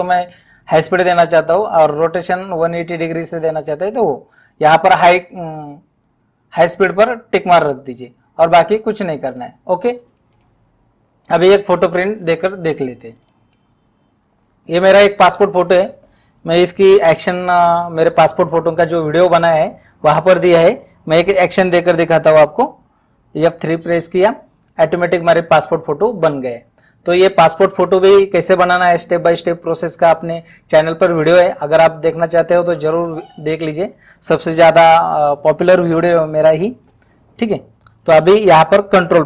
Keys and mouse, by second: 9.3 click, 11.4 click, 13.2 click, 23.5 F3, 38.1 Home.